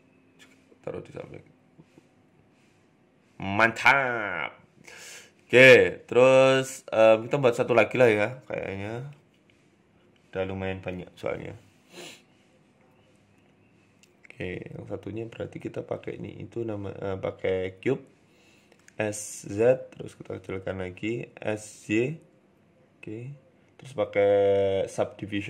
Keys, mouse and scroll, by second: 0.0 a, 0.2 l, 0.8 g, 1.8 Tab, 2.0 middle click, 2.4-3.9 scroll down 8, 2.5 middle click, 2.9 middle click, 5.7 scroll up 3, 5.9 shift+middle click, 6.3 g, 7.2-7.7 scroll down 4, 7.4 shift+middle click, 10.3-10.9 scroll down 2, 10.6-10.9 scroll up 4, 11.1-11.4 scroll up 1, 11.1 KP_1, 11.8 g, 16.0 shift+middle click, 16.4 shift+a, 18.1 s, 19.0 s, 20.0 KP_7, 20.4 scroll up 4, 20.6 shift+middle click, 21.0 s, 22.9 click, 23.1 click, 24.9 scroll down 2, 25.0 Tab, 25.2 scroll up 3.